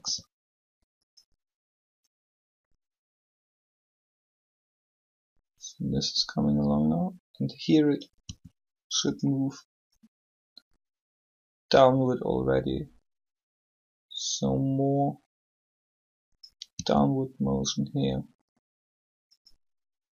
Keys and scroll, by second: 0.0 r, 8.2 r, 16.7 r.